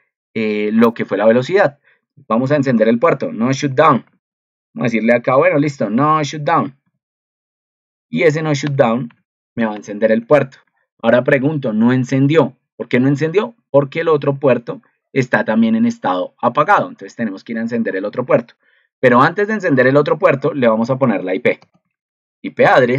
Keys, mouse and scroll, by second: 10.6 ctrl+2, 14.2 ctrl+2.